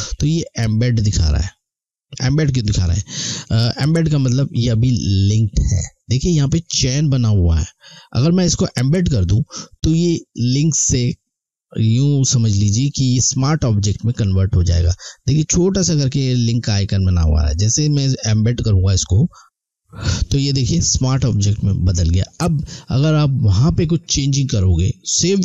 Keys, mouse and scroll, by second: 18.2 click.